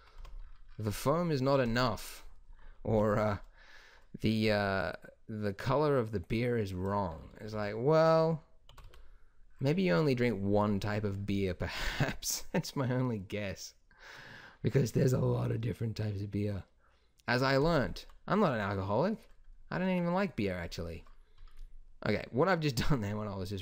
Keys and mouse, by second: 0.1 Tab, 2.9 o, 7.4 z, 8.6 g, 17.8-19.7 drag, 19.7-23.6 middle drag.